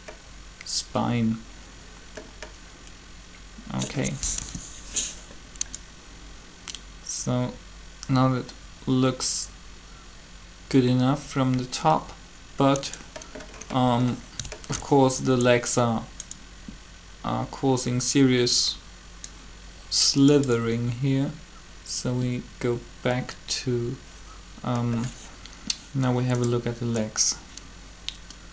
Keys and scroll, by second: 4.3 7.